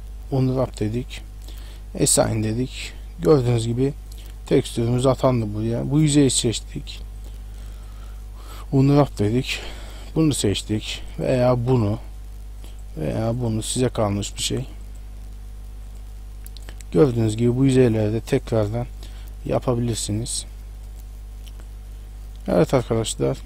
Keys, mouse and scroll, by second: 1.5 click, 2.3 middle click, 3.5 scroll up 1, 4.3 right click, 5.1 right click, 5.7 right click, 7.3 u, 9.3 click, 9.9 click, 11.1 click, 11.7 click, 12.7 click, 13.4 click, 14.4 click, 14.9 click, 15.9 click, 16.5 middle click, 17.5 right click, 18.9 u, 20.9 click, 21.5 click, 22.2 middle click, 23.3-23.4 scroll down 2.